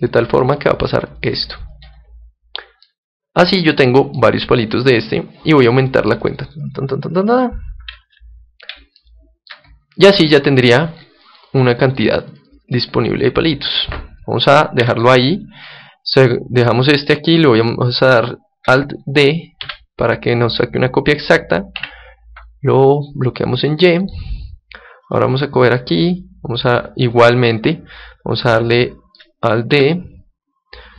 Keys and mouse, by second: 2.8-4.6 middle drag, 5.5-8.9 drag, 8.9-11.5 middle drag, 11.6-14.7 drag, 14.7 Tab, 19.6 alt+d, 23.9-25.8 drag, 25.0-26.8 right drag, 28.8-30.6 middle drag, 29.7 alt+d.